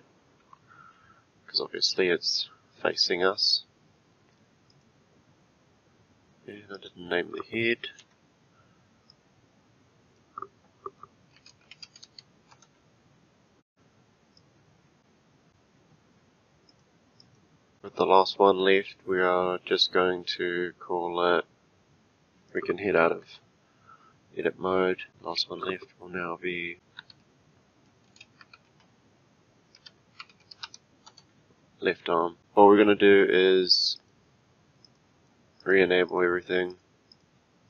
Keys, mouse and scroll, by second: 6.7 click, 8.0 F2, 14.4 click, 16.7 click, 17.2 click, 22.5 click, 23.2 Tab, 25.1 click, 26.7 F2, 34.0 click, 34.8 click, 35.6 click, 36.1 click, 36.7 click, 37.1 click.